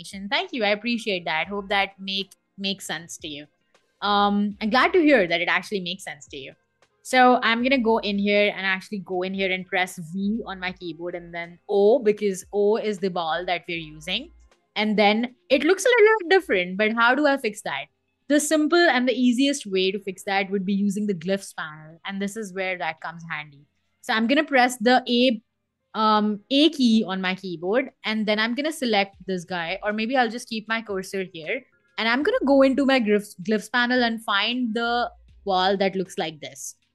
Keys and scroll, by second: 8.8 v, 10.8 o, 22.6 BackSpace, 24.3 a.